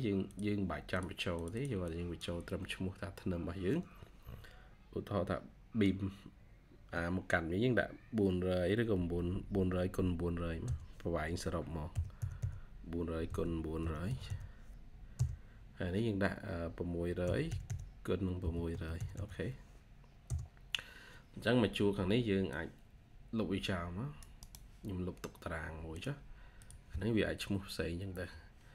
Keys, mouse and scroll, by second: 1.3 double click, 9.1 9, 11.5-14.6 typing, 15.0 Return, 16.9-19.5 typing, 20.1 Return, 24.3 right click, 28.0 Delete.